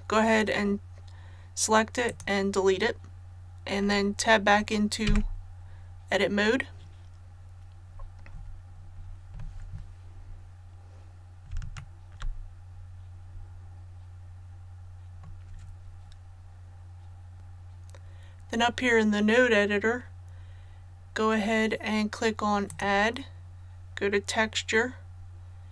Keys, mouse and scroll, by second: 5.1 Tab, 7.4-8.3 scroll up 1, 11.7-15.5 shift+middle drag, 22.6 click.